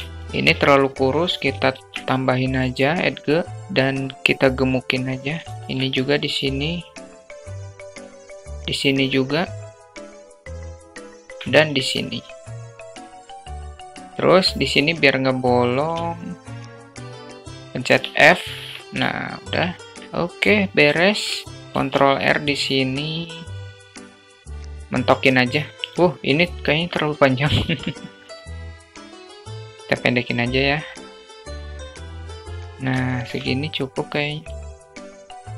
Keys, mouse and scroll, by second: 0.5 ctrl+r, 2.7-4.1 drag, 4.4 shift+middle click, 5.6 ctrl+r, 5.8-7.1 drag, 7.2 alt+shift+middle click, 7.8 ctrl+r, 8.7-9.8 drag, 10.0 click, 10.2 s, 10.8 ctrl+r, 11.8-13.1 drag, 13.1 Tab, 13.5 alt+z, 14.0 middle click, 14.8 alt+middle click, 15.6 alt+z, 17.2 f, 17.5 Tab, 17.9-18.3 alt+middle drag, 19.2 alt+shift+middle drag, 21.5 ctrl+r, 24.9 Tab, 25.4-25.7 middle drag, 26.5 Tab, 27.1 alt+z, 27.4 click, 29.1-30.7 drag, 31.0 Tab, 31.5 click, 32.0 alt+z, 32.0 alt+middle click, 32.2 drag, 32.5-32.9 alt+shift+middle drag, 33.5 alt+shift+middle click, 34.1 Tab, 34.7 alt+middle click, 34.8 alt+z, 34.8 click, 34.8 a, 35.0 click, 35.4 middle click.